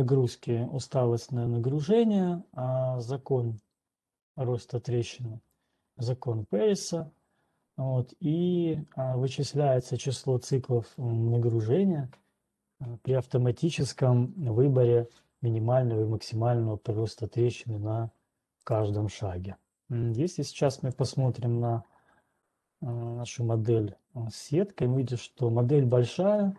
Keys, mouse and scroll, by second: 0.8 click, 5.8 click, 11.3 click, 19.1 click, 19.6 right click, 21.9 scroll, 22.5-23.6 scroll, 25.4 scroll.